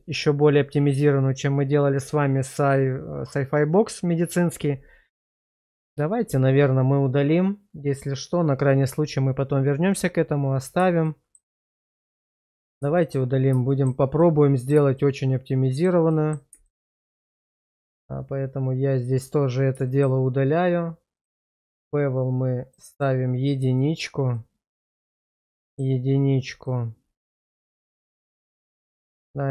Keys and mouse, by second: 11.1 shift+middle drag, 12.2 middle click, 12.9 shift+middle drag, 13.7 shift+middle drag, 14.2 middle click, 15.0-15.8 shift+middle drag, 16.1 middle click, 16.6 shift+middle drag, 18.9 click, 19.9 shift+middle drag, 22.9 click, 23.8 shift+middle click, 24.3-25.3 middle drag, 25.5 shift+middle drag, 26.6-28.7 middle drag, 28.8 shift+middle click, 29.2-29.5 middle drag.